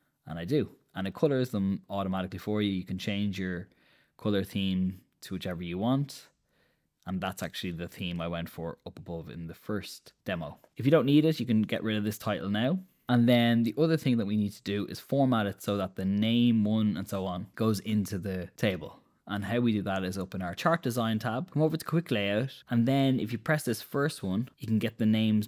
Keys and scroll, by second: 12.4 BackSpace.